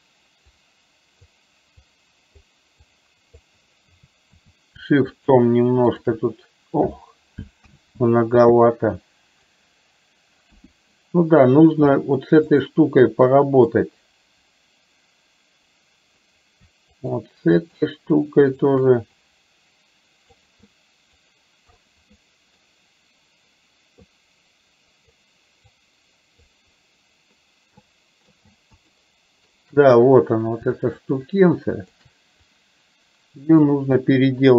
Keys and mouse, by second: 0.6 click, 1.9 click, 3.0 click, 5.1 shift+click, 6.0 shift+click, 7.7 ctrl+z, 8.9 click, 10.6 KP_1, 12.6 click, 13.9-16.4 drag, 17.0 shift+click, 17.6 shift+click, 18.6 shift+click, 19.2-20.4 drag, 20.9 click, 21.9 middle click, 24.2-25.2 drag, 25.7 click, 29.0 shift+middle click, 31.5 shift+click, 32.5-33.7 drag, 34.0-34.5 middle drag.